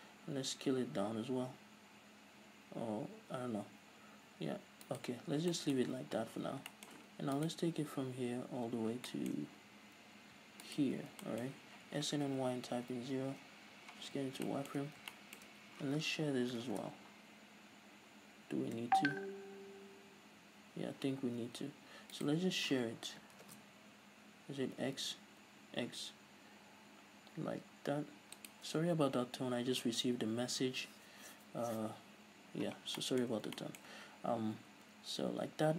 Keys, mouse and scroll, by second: 0.4 s, 5.1 right click, 5.4 scroll down 1, 5.7-7.5 shift+middle drag, 6.5 z, 7.5 right click, 8.9 scroll up 1, 9.2-10.8 shift+middle drag, 9.6-10.5 scroll up 2, 10.5-10.8 scroll up 1, 10.8 ctrl+right click, 11.2 middle click, 11.2 scroll down 2, 11.4-12.2 shift+middle drag, 12.0 s, 13.6 Return, 14.2-17.0 middle drag, 14.2 z, 14.9-15.3 scroll up 3, 15.8-16.8 scroll up 2, 16.8 ctrl+alt+shift+s, 22.4 right click, 23.5 ctrl+alt+shift+s, 28.7 shift+click, 33.2-35.7 middle drag.